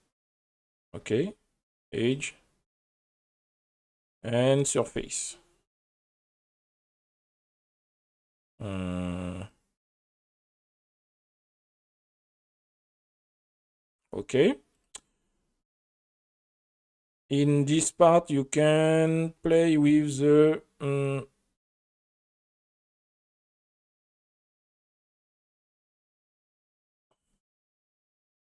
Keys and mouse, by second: 0.8-2.2 drag, 3.2-5.2 drag, 9.5-10.9 drag, 12.4-13.9 drag, 14.7 click, 17.4 click, 17.7 click, 21.7 click, 23.6 click, 24.8 drag, 25.5 click, 27.3 click.